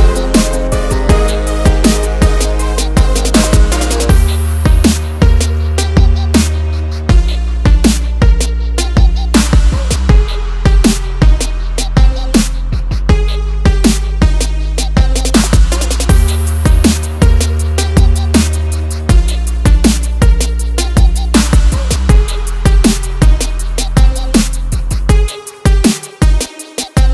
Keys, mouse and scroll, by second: 1.4 ctrl+c, 2.1 click, 2.8 click, 3.6 scroll down 1, 3.9 click, 4.4 ctrl+v, 5.2 click, 5.9 scroll up 1, 6.2 scroll down 1, 7.0 click, 7.8 click, 9.6 click, 11.6 scroll down 1, 11.9 scroll up 1, 12.2 ctrl+click, 13.3 click, 13.4 double click, 16.4 ctrl+click, 17.5 click, 18.4 click, 19.1 click, 19.3 double click, 21.5 click, 22.6 click, 22.7 double click, 24.7 click, 26.4 click, 26.6 double click.